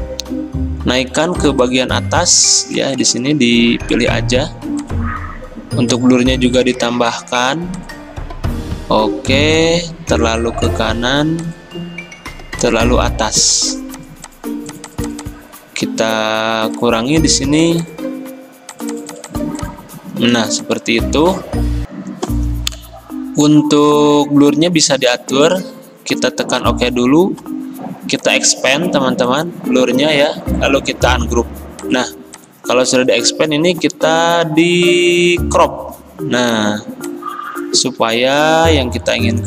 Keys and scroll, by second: 33.3 ctrl+z, 37.8 ctrl+z.